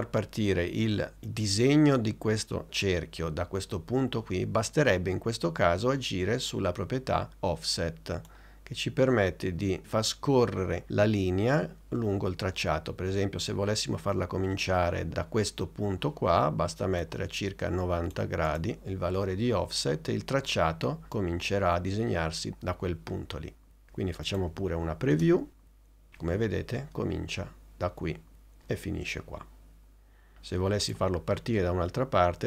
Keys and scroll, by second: 17.8 9, 18.4 0, 24.5 n, 25.1 space.